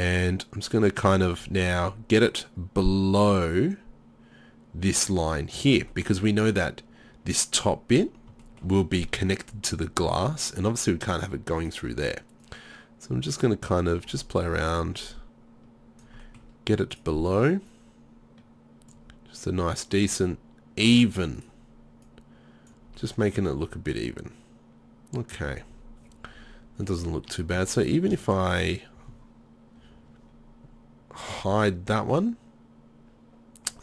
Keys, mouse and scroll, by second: 1.4-6.0 middle drag, 8.5 middle click, 11.7-14.5 right drag, 17.7-18.9 middle drag, 20.3 middle click, 22.1 right click, 23.0-24.5 middle drag, 24.6 middle click, 26.7 middle click, 27.6 Tab, 31.4 h, 33.5-33.8 middle drag.